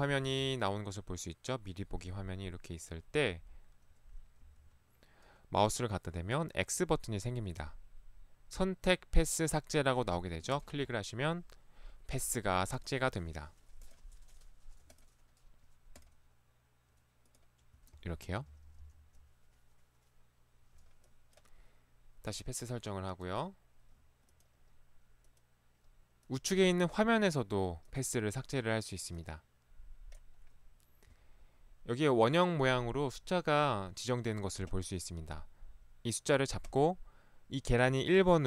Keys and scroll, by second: 4.5 Escape, 4.7 ctrl+1, 18.3 ctrl+x.